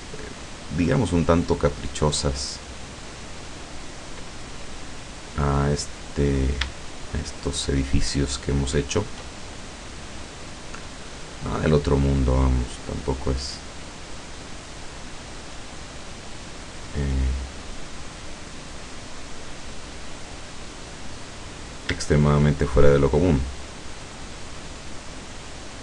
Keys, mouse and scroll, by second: 0.5 click, 3.7 click, 5.1 click, 6.4 shift+right click, 7.1 shift+right click, 8.2 shift+right click, 8.9 shift+right click, 9.5 shift+middle click, 10.4 scroll down 2, 10.7 middle click, 11.8-13.7 middle drag, 14.0-14.3 scroll down 1, 14.6-15.1 scroll down 1, 15.5 scroll down 1, 17.2 scroll down 1, 18.1-18.9 scroll down 2, 19.4-21.3 middle drag, 21.3 right click, 21.7 scroll up 1, 22.7 shift+right click, 23.5 shift+right click, 24.0 shift+right click, 25.3 shift+right click.